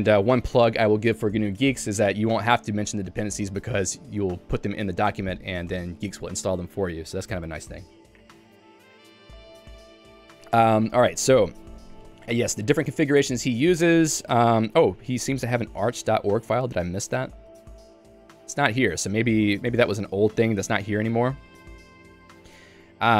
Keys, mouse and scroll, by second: 0.3 Escape, 12.8 j, 16.6 super+w, 17.3 Escape, 17.6 super+e, 18.2 k, 19.8 q, 20.5 j, 21.1 k, 22.2 j.